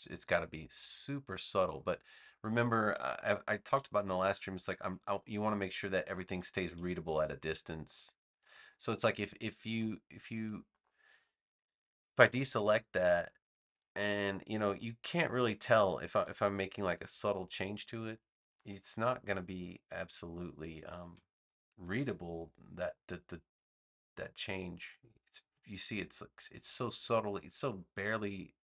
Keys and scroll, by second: 3.9 super+-, 4.5 super+-, 5.9 super+-, 6.9 super+-.